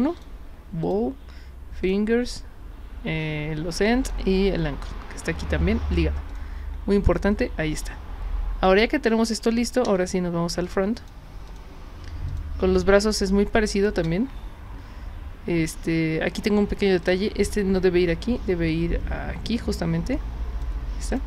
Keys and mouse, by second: 0.2 click, 0.8 click, 1.9 click, 4.1 click, 6.3 click, 9.9 space, 10.6 click, 11.4 click, 12.3 click, 12.8-13.8 drag, 17.0 click, 18.2-20.6 drag.